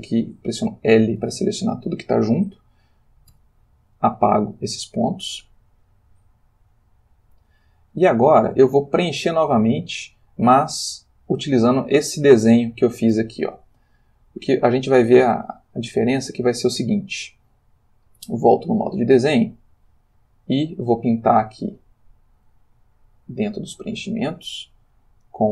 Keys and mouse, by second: 0.6 l, 3.3 x, 4.6 click, 6.7 click, 17.9 click, 18.8 click, 20.0 click, 23.4 click, 25.2 click.